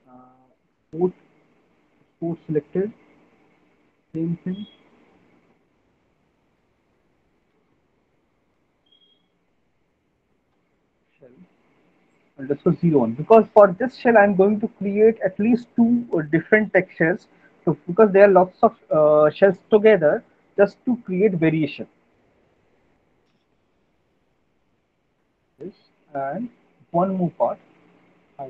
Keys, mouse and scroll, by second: 2.7 click, 4.9 click, 5.7 click, 6.1-7.2 BackSpace, 7.5 BackSpace, 8.4 s, 10.7 typing, 21.6 click, 25.2 click, 25.2 alt+middle click, 25.6 middle click, 25.8 middle click, 26.0 alt+middle click, 26.6 alt+middle click, 27.0 middle click, 28.0 alt+middle click.